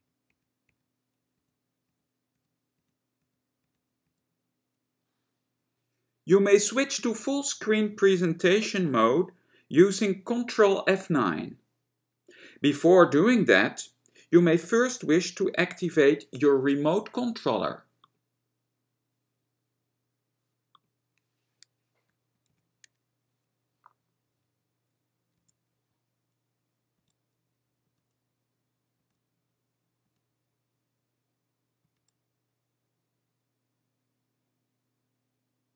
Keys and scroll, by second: 0.0 F10, 0.3 F10, 0.8 F10, 1.5 F11, 1.9 F11, 2.4 F11, 2.8 F11, 3.3 F11, 3.7 F11, 4.1 F11, 23.2 ctrl+F9, 25.4 F9, 27.9 F11, 29.1 F11, 30.2 F11, 32.0 F11.